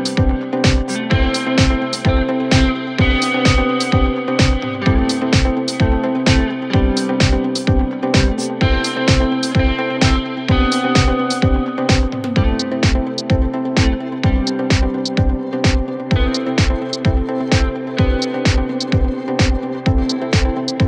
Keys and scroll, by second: 6.3 3, 8.0 4, 12.3 ,, 14.3 0, 14.6 Return, 14.7 0, 14.9 9, 15.0 Return, 15.9 Return.